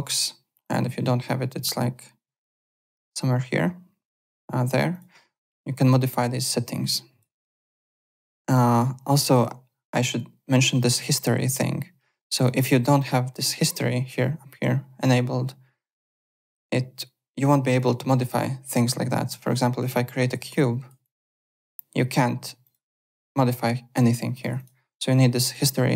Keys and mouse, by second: 0.6 click, 4.9 click, 5.7 click, 6.7 click, 7.4 click, 9.3 click, 12.3 click, 15.9 click, 16.5 click, 17.4 click, 18.3 click, 19.5 shift+right click, 20.5 click, 22.6 click, 24.3 click, 25.5 click.